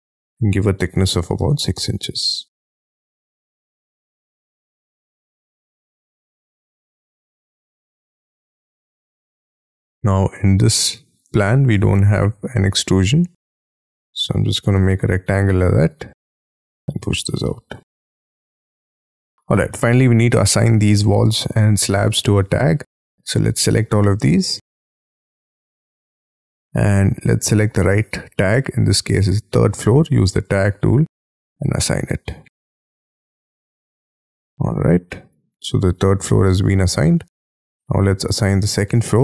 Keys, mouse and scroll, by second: 0.9 6, 1.4 shift+', 1.7 Return, 2.1 scroll down 6, 2.3 space, 2.5 Escape, 2.7 middle click, 3.2 r, 4.2 scroll up 1, 4.4 middle click, 4.8-5.4 scroll up 3, 5.4 middle click, 5.7 middle click, 6.0-8.4 typing, 6.6 double click, 8.1 Return, 8.5 Escape, 8.7 Escape, 8.9-9.4 scroll down 7, 9.4 double click, 9.9 double click, 10.2 double click, 10.6-11.2 scroll up 5, 11.2 j, 11.7 r, 14.0 space, 14.7 p, 15.5 j, 17.0 space, 17.1 Escape, 17.4 Escape, 17.7-18.5 scroll down 16, 18.5 middle click, 18.9 middle click, 19.5 middle click, 20.0 scroll up 7, 20.5 scroll down 1, 24.2 scroll up 6, 24.6 middle click, 25.8 scroll down 3, 32.6-35.4 scroll up 4, 35.4-37.0 scroll down 4, 37.0 middle click.